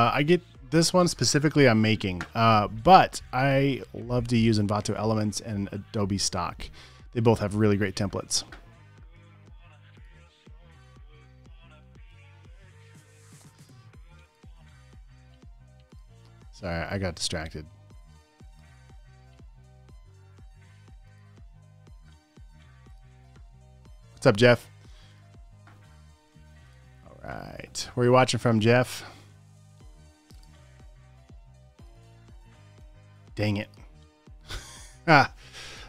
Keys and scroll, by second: 19.9 super+s, 22.0 super+w, 28.1 space, 28.3 space, 29.7 space, 29.9 space, 30.0 v, 33.1 v.